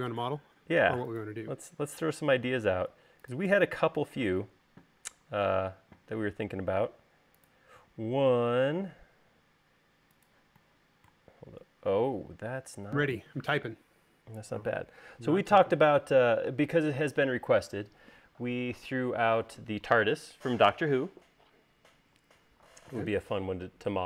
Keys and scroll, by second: 4.3 m.